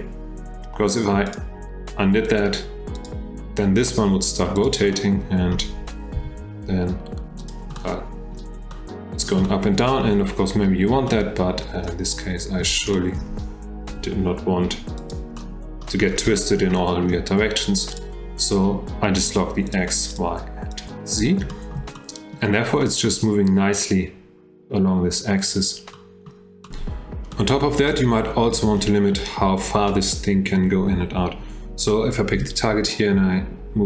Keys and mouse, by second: 1.3 click, 2.3 click, 3.0 click, 4.9-5.6 drag, 6.9 g, 7.8 drag, 7.9-8.4 middle drag, 8.7-9.2 middle drag, 9.4-9.8 shift+middle drag, 11.1-11.6 middle drag, 12.9 shift+middle drag, 13.9 g, 15.4 middle click, 16.4 shift+middle drag, 16.8-17.1 middle drag, 18.0 click, 19.7 click, 20.1 click, 20.7 click, 21.5-21.8 shift+middle drag, 22.0-22.3 drag, 22.8 shift+drag, 26.0 click, 26.6 click, 27.3 click, 28.5-28.8 drag, 32.4 g.